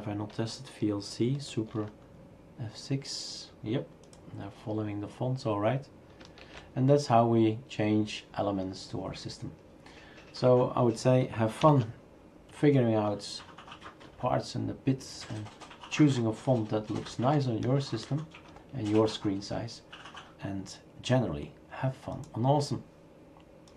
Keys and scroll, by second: 1.5 super+F6, 6.4 shift+super+q, 11.6 alt+Right.